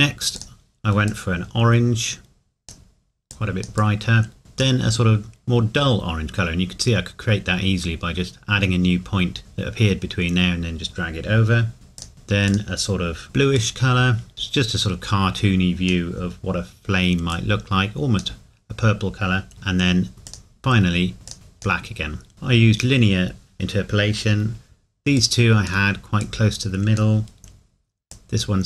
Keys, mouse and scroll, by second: 12.0 click, 20.3 click, 25.1 click.